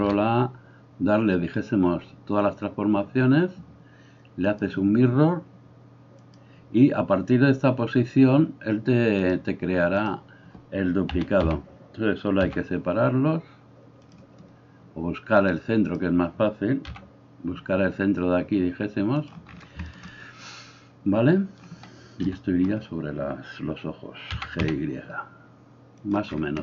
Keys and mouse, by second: 0.0 ctrl+a, 11.2 a, 11.5 a, 12.4 g, 14.1-15.4 middle drag, 15.4-19.3 drag, 16.9 g, 19.3-26.6 middle drag, 22.3 KP_3, 24.4 g.